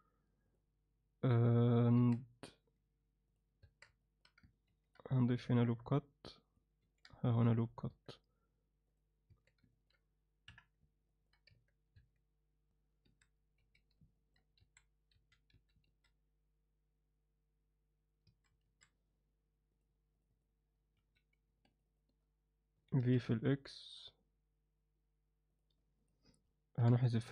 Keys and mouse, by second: 0.5 drag, 2.0 Tab, 3.3 click, 3.6 Tab, 4.0 alt+middle click, 4.7 ctrl+r, 7.9 Tab, 9.0 click, 9.3 Tab, 9.7 ctrl+alt+middle click, 10.5 KP_1, 11.1 ctrl+alt+middle click, 11.5 Tab, 12.0 Tab, 13.0-15.5 typing, 14.1 ctrl+alt+middle click, 18.3 a, 18.9 alt+a, 19.7 click, 20.2 click, 20.3 click, 21.0 z, 21.9 shift+click, 22.9 v, 26.8 ctrl+l.